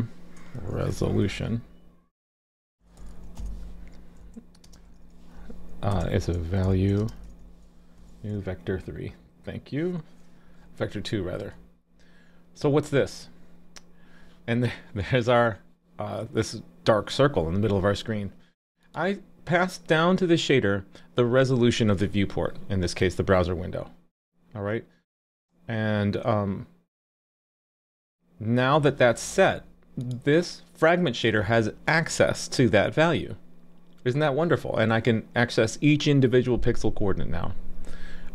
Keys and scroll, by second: 12.6 super+s.